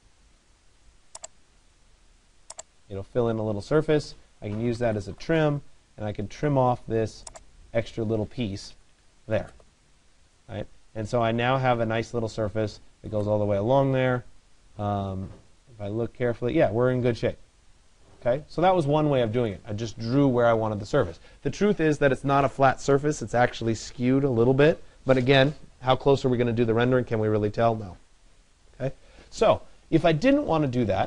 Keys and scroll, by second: 4.8 Return.